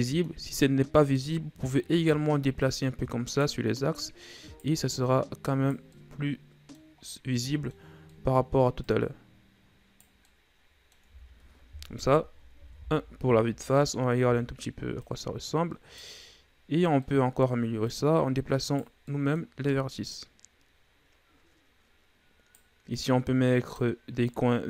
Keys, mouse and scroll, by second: 1.0-2.7 right drag, 4.0 right click, 4.9 right click, 5.9-6.9 middle drag, 6.9-7.3 scroll up 2, 7.3-8.8 middle drag, 8.8 right click, 10.3 middle click, 11.0 Tab, 11.9 KP_1, 12.5 a, 12.9-13.5 scroll down 6, 13.5-14.2 scroll up 5, 14.2 Tab, 15.0 right click, 16.5-17.0 scroll down 1, 17.0 middle click, 17.9 right click, 19.0 middle click, 19.6-20.1 scroll up 1, 20.1 right click, 22.9 right click, 24.3 right click.